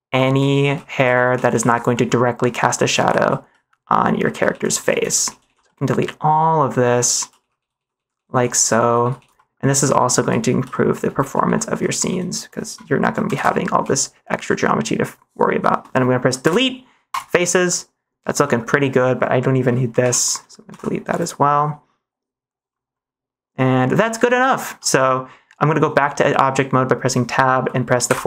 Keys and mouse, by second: 0.0-1.4 typing, 1.8 middle click, 2.7-5.3 typing, 3.4 middle click, 5.6-6.7 middle drag, 7.1-9.1 typing, 9.2 middle click, 9.7 middle click, 10.1-12.1 typing, 10.6 middle click, 13.2 Delete, 16.3 Delete, 17.6 middle click, 18.3 middle click, 19.9 l, 20.6 Delete, 21.4-22.6 middle drag, 24.6 Tab, 28.0 /.